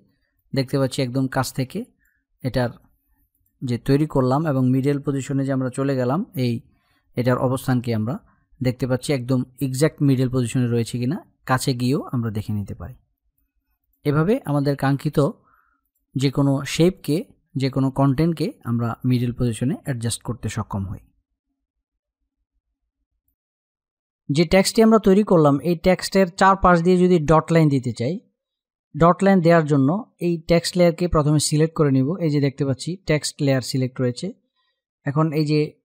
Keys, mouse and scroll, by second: 0.4 space, 3.0 click, 11.5 click, 11.7-13.5 typing, 13.1 click, 15.5 click.